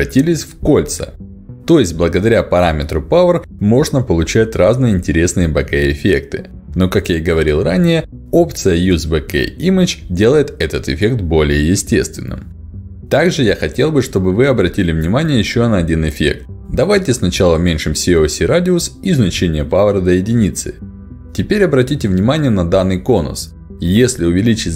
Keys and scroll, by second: 6.9 ctrl+alt+d, 15.5 1, 15.8 Return, 20.2 Return, 23.2 ctrl+alt+d.